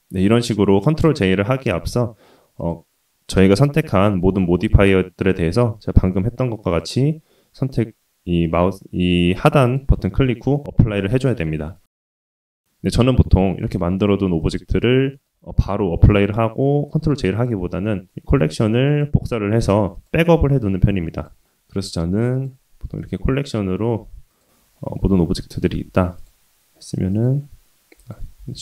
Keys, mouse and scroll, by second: 0.2 ctrl+z, 0.5-0.8 middle drag, 2.5-5.9 drag, 6.7-8.4 drag, 9.6-10.8 drag, 11.2 click, 11.5 middle click, 11.9 scroll down 1, 12.2-12.8 drag, 13.1-13.4 middle drag, 13.5-13.9 scroll down 2, 13.8 click, 14.2-14.5 drag, 14.7 click, 17.3-17.6 scroll up 1, 17.6-19.3 scroll down 1, 19.3-19.9 scroll down 1, 20.8 click, 21.3 click, 22.3 click, 23.0 click, 23.5-24.3 scroll down 2, 24.3 click, 24.6-25.1 scroll up 2, 25.3 shift+click, 26.1 click, 27.1 click, 28.0 click, 28.3 x.